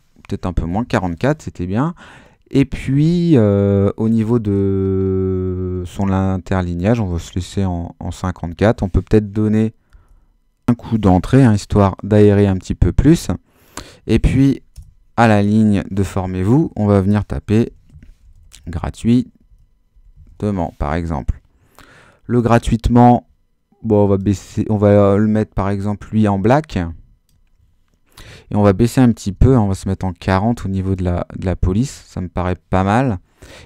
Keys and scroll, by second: 0.6 BackSpace, 0.7 4, 9.9 Return, 14.7 Return, 17.2-20.9 typing, 29.3 4.